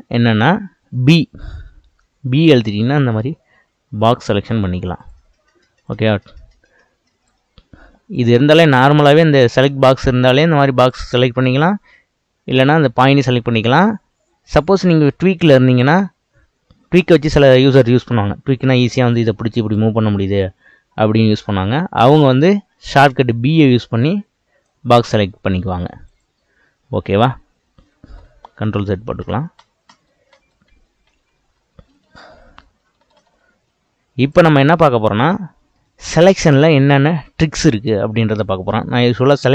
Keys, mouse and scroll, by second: 1.3 b, 4.0 middle click, 5.0 click, 5.8 click, 8.1-10.8 drag, 12.6 click, 14.5-15.8 drag, 17.2-19.1 scroll up 1, 19.1 scroll up 1, 19.2 click, 20.0 click, 22.8 b, 26.1 click, 26.7-28.0 scroll down 2, 28.0 ctrl+z, 28.2 ctrl+z, 28.4 ctrl+z, 28.6 ctrl+z, 28.8 ctrl+z, 29.2 ctrl+z, 29.6 ctrl+z, 29.9 ctrl+z, 31.0 ctrl+z, 31.3 ctrl+z, 31.6 ctrl+z, 31.8-32.2 ctrl+z, 32.5 ctrl+z, 32.8-33.3 ctrl+z, 34.2 click, 34.7-37.7 middle drag, 38.4-39.5 drag.